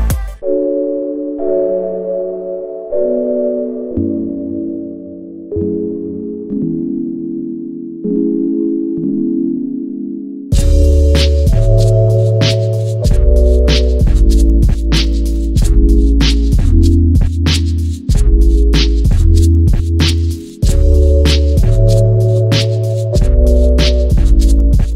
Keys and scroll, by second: 5.9 0.